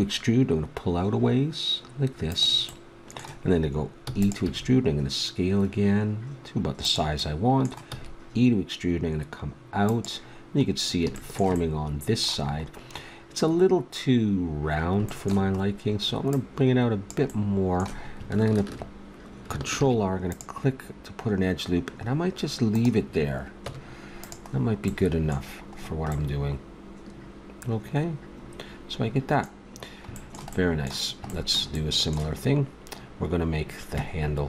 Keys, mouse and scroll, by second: 4.1 e, 4.4 s, 7.2-9.8 drag, 7.9 e, 10.7 click, 13.7-15.1 middle drag, 16.3-18.1 middle drag, 18.7-19.7 middle drag, 19.7 ctrl+r, 23.7 Tab, 30.1-32.0 middle drag.